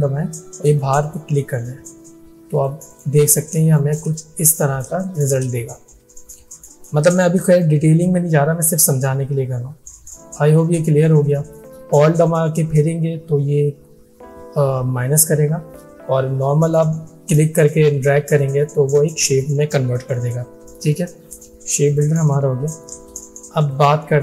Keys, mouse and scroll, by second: 1.1 alt+click, 3.7 space, 3.8 click, 4.4 alt+scroll down 1, 5.0 space, 5.1 click, 21.4-22.3 drag.